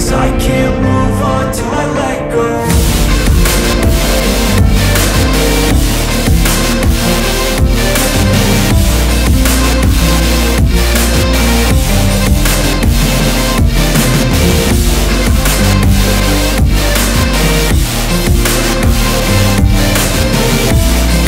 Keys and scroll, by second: 0.8 n, 1.4 Return, 2.9 a, 5.7 Return, 8.2 shift+F2, 9.3 Escape, 10.3 Delete, 13.5 Escape, 14.8 F3, 16.3 Delete, 18.0 shift+F2, 19.1 Escape.